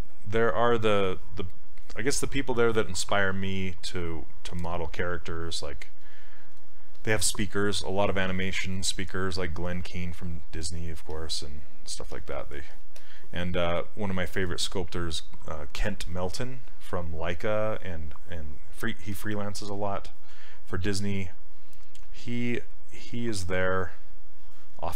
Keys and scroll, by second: 19.6 s.